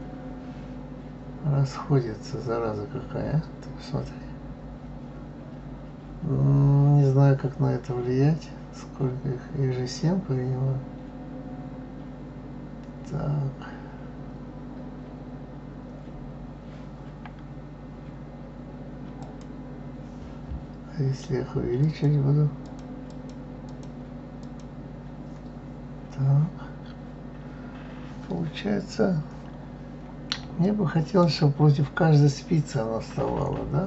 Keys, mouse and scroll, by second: 21.8-25.2 drag, 29.1-30.0 scroll down 1, 30.0-30.6 scroll down 1, 30.6-32.4 shift+middle drag, 32.4-33.8 scroll up 1.